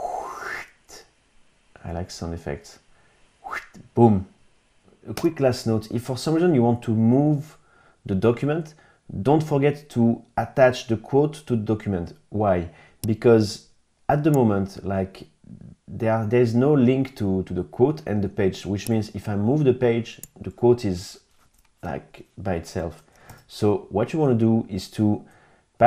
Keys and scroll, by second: 23.3 super+z.